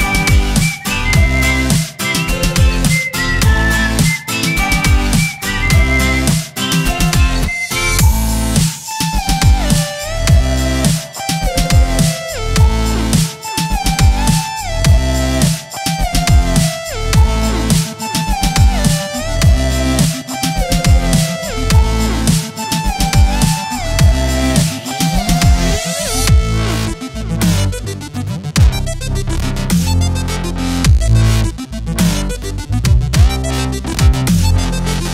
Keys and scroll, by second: 2.4 v, 2.9 space, 3.3 v, 4.9 space, 5.7 ctrl+a, 6.2-8.5 typing, 6.7 Return, 7.4 Return, 8.6 ctrl+Return, 9.7 ctrl+a, 10.1-12.5 typing, 10.9 Return, 12.0 Return, 12.9 ctrl+Return, 13.8 ctrl+a, 14.3 shift+s, 14.4 m, 14.7 Return, 15.7-17.4 typing, 16.8 Return, 18.2 ctrl+Return.